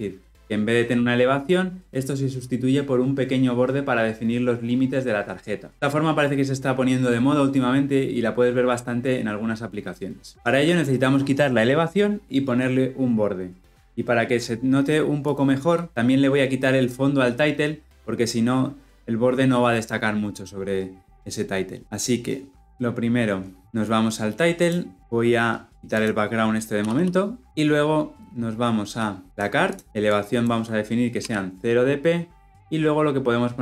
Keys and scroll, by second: 24.5 ctrl+b.